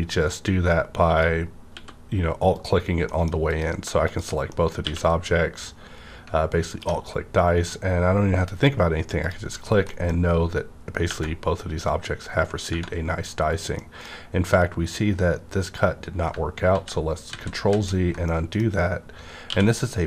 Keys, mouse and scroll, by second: 0.3-2.6 drag, 1.7 x, 3.1 middle click, 3.5 click, 4.0 shift+click, 4.5 middle click, 4.8 q, 6.7 alt+click, 7.3 scroll up 1, 8.5 scroll down 1, 8.8-9.2 scroll up 1, 9.2 click, 9.9 middle click, 10.0 click, 10.2 scroll up 1, 13.7 middle click, 16.7-17.7 typing, 18.2-20.0 middle drag, 19.4 q.